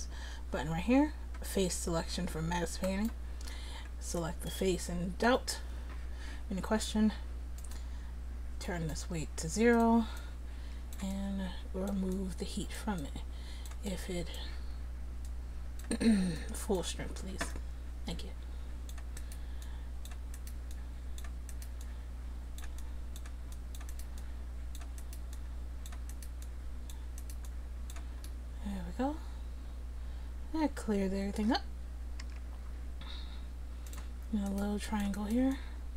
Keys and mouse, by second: 2.9-4.3 drag, 7.6-19.7 drag, 22.2-29.2 drag, 32.3 r, 34.5 click.